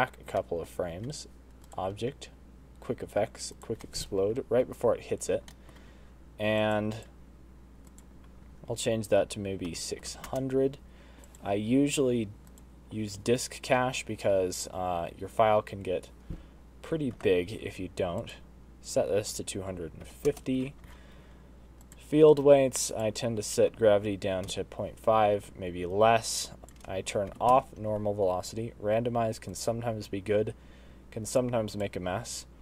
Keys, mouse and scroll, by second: 0.6 middle click, 1.9 click, 4.0 middle click, 4.6-4.9 scroll down 1, 5.3-5.7 scroll up 2, 5.7 middle click, 6.0 scroll down 1, 6.8 click, 7.2 click, 8.1 click, 10.3 0, 11.5 click, 12.8 click, 17.5 ctrl+s, 18.4 click, 20.8-21.8 scroll down 22, 21.8 click, 22.3-22.9 scroll down 1, 22.9 click, 26.6 click, 29.5 click, 31.3 click, 31.8 click.